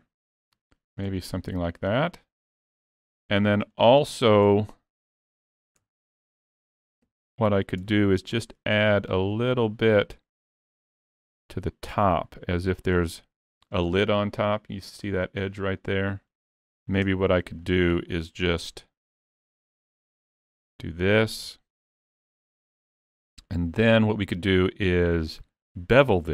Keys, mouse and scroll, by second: 1.3 middle click, 3.9 shift+middle click, 4.6 scroll up 1, 4.7 middle click, 5.8 Tab, 6.8 s, 15.8 middle click, 17.1 Tab, 17.6 shift+middle click, 18.5 ctrl+r, 22.9 scroll up 3, 23.2 shift+middle click, 23.7 middle click.